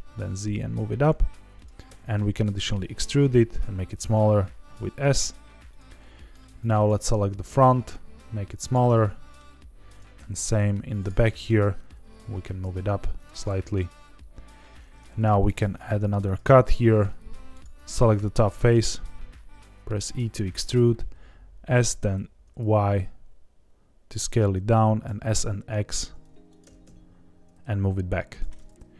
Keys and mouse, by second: 1.5 click, 1.8 e, 2.8 click, 3.3 s, 5.7 click, 5.9 middle click, 7.4 s, 8.6 click, 8.8 middle click, 10.1 s, 10.9 click, 11.2 middle click, 11.8 g, 11.8 z, 13.1 click, 13.4 middle click, 15.0 ctrl+r, 16.2 click, 16.6 3, 18.4 e, 20.4 click, 20.8 s, 22.0 y, 24.1 click, 25.0 s, 25.3 x, 26.4 click, 26.6 g, 26.8 x, 28.3 click, 28.5 middle click.